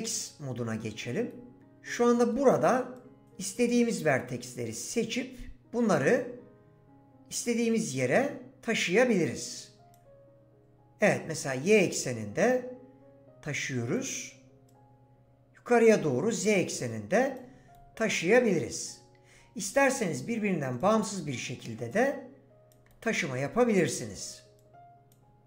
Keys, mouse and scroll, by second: 5.9 click, 18.5 middle click, 23.9 click.